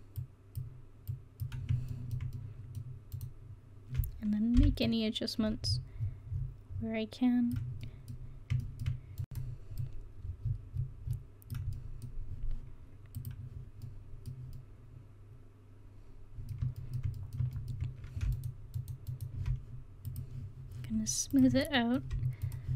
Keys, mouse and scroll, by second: 2.0-3.2 middle drag, 3.2-4.7 right drag, 4.7 o, 5.1-6.7 drag, 8.2 middle click, 9.3 right click, 9.8 middle click, 10.4-11.3 scroll down 1, 11.3 click, 11.8 middle click, 13.2 click, 14.0-15.5 middle drag, 15.9 middle click, 16.8 middle click, 17.6 middle click, 18.3-21.8 drag, 20.1 right click.